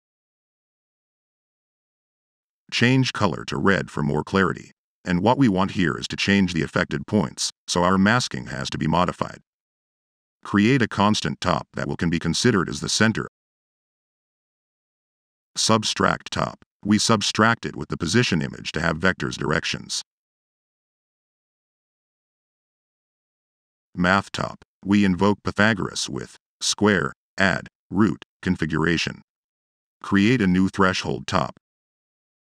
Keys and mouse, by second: 1.1 Return, 1.1 v, 13.3 Tab, 16.1 s, 16.5 b, 22.7-24.1 typing.